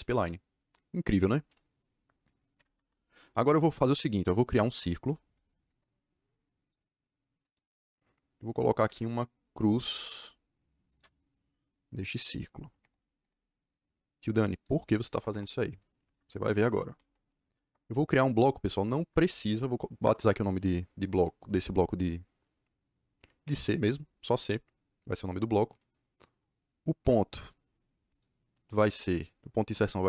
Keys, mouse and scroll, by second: 2.5 Escape, 2.6 Escape, 2.8 Escape, 5.0 c, 5.6 KP_Enter, 6.5 click, 7.3 click, 8.7 l, 8.8 Return, 10.8 click, 12.1 click, 12.7 Return, 13.1 Return, 14.4 click, 15.1 Return, 15.9 Escape, 16.1 Escape, 16.6-17.8 typing, 23.4 c, 25.8 click, 28.0 click.